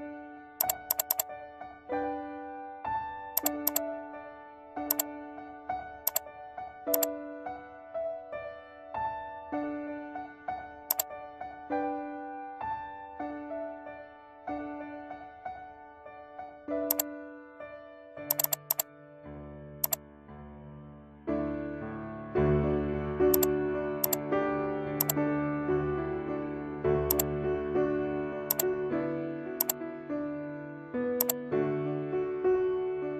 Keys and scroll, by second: 22.4 ctrl+=, 26.5 ctrl+=, 32.7 ctrl+z.